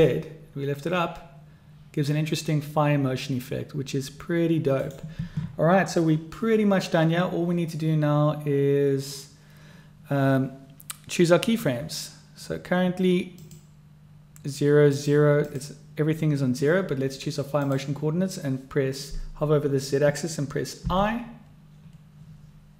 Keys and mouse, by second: 13.4 click, 14.9-17.6 drag, 20.8 i.